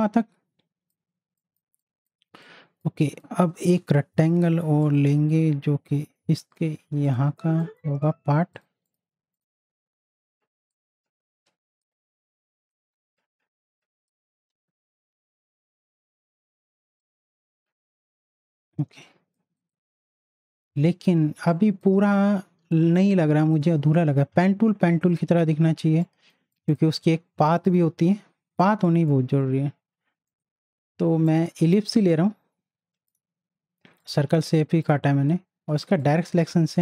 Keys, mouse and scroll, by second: 1.6 space, 1.8 click, 2.4 click, 2.9 space, 3.0 click, 3.8 m, 4.8-12.7 drag, 12.7-14.2 alt+drag, 14.5 z, 14.8-16.3 drag, 18.9 space, 19.0 click, 19.4 space, 19.6 click, 25.4 click, 26.0 click, 26.4 space, 26.5 click, 28.7 space, 28.8 click, 30.3 right click, 31.2 click, 32.1-36.8 shift+drag.